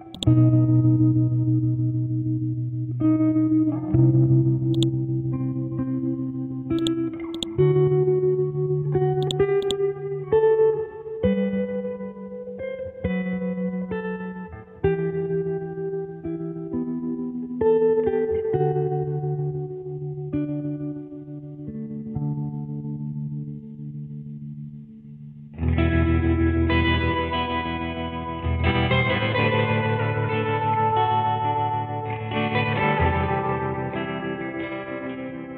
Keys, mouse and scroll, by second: 0.2 click, 4.8 click, 8.4-9.2 scroll up 1, 9.2 click, 10.0 scroll up 1, 13.3 typing, 15.0-18.0 typing, 19.3 Return, 19.4-23.5 typing, 25.4 space, 30.2-32.5 typing, 33.8-34.6 scroll down 1, 34.6-35.3 scroll up 1, 35.3 Return.